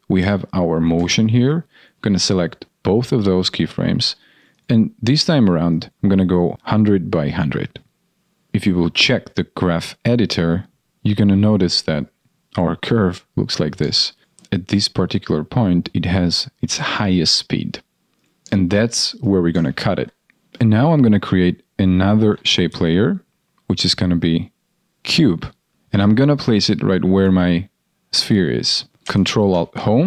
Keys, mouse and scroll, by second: 19.7 ctrl+shift+d, 20.3 ctrl+z, 25.7 ctrl+alt+Home, 28.9 ctrl+z, 29.4 ctrl+alt+Home.